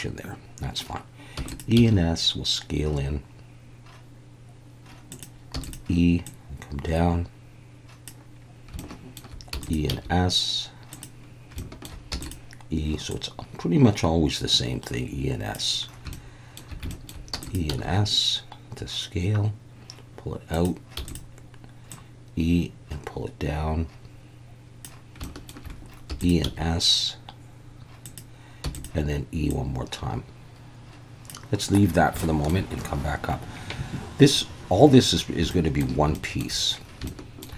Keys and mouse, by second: 1.4 e, 1.5 click, 1.8 s, 5.1 click, 5.5 e, 5.6 click, 8.9 shift+middle click, 9.5 e, 9.6 click, 9.9 s, 10.9 click, 11.7 shift+middle click, 12.1 e, 12.2 click, 13.1 click, 16.2 shift+middle click, 17.0 shift+middle click, 17.3 e, 17.4 click, 17.7 s, 20.5 click, 21.0 e, 21.1 click, 25.3 shift+middle click, 26.1 e, 26.2 click, 26.4 s, 28.0 click, 28.6 e, 29.5 click, 32.3 shift+click, 35.6 shift+click, 36.2 shift+click, 37.2 shift+click.